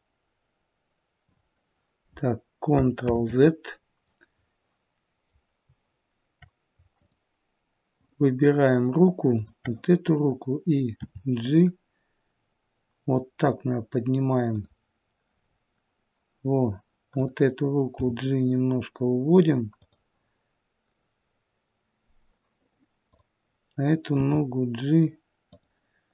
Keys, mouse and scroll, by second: 3.0 ctrl+z, 4.3-5.6 scroll up 1, 6.1-6.6 scroll up 2, 6.9 shift+click, 10.9 shift+click, 10.9 g, 17.1 click, 17.9 g, 23.0 click, 24.1 g.